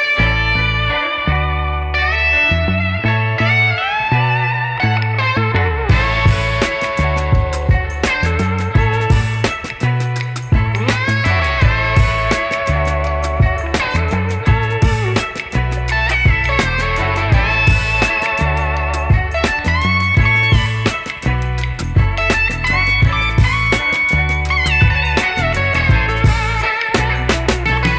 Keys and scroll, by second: 2.2 k, 4.0 ctrl+shift+d, 13.7 q, 13.9 u, 14.3 a, 14.7 d, 23.5 KP_Decimal, 23.8 KP_1, 24.2 KP_8.